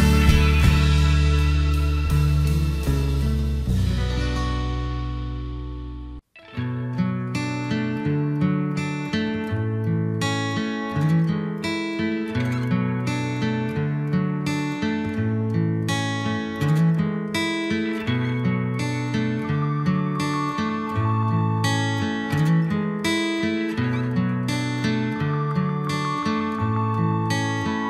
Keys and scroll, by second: 6.2 ctrl+g.